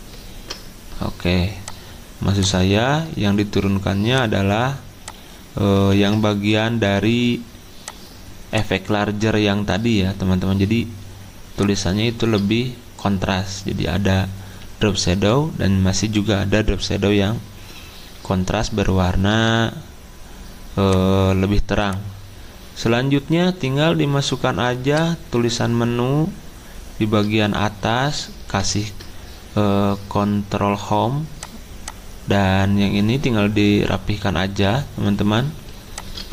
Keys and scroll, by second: 5.9 ctrl+z, 28.5 ctrl+Home.